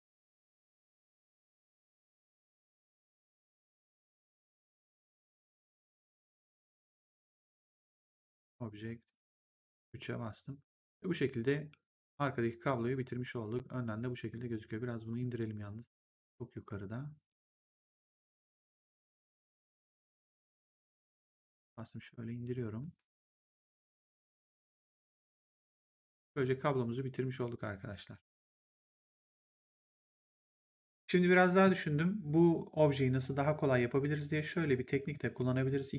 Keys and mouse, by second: 0.8 click, 1.8 shift+click, 5.1 shift+click, 6.6 click, 7.3 right click, 8.3 3, 9.3 click, 15.1 click, 16.5 1, 17.2 right click, 18.0 click, 19.2 w, 20.1 click, 20.9 3, 21.3 click, 22.7 right click, 23.6 click, 30.8 click, 34.2 click, 35.6 shift+click.